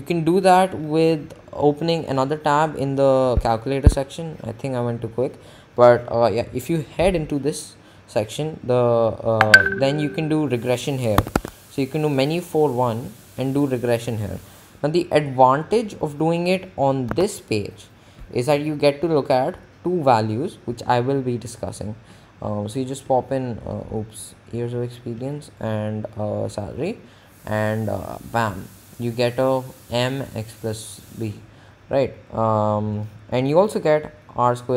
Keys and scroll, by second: 0.3 Menu, 4.0 Escape, 9.9 Menu, 11.4 4, 11.8 1, 17.3 3, 32.3 Down.